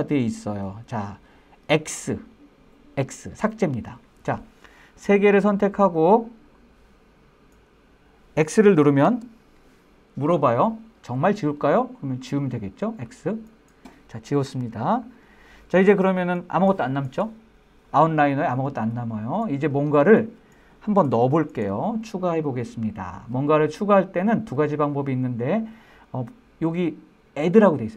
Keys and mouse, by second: 7.4-9.2 drag.